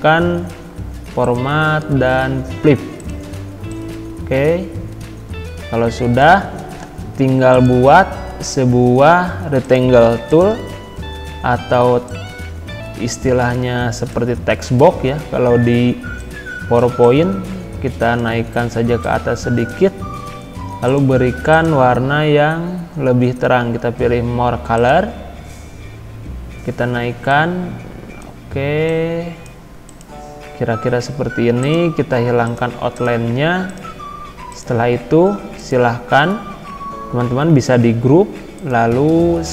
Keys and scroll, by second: 37.2 ctrl+g.